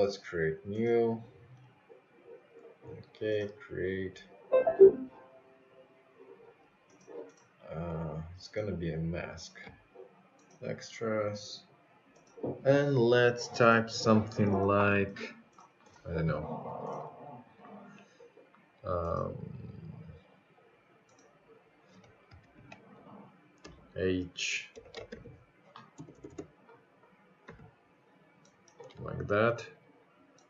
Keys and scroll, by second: 15.4 shift+h, 16.7 -, 19.1 BackSpace, 20.6 4.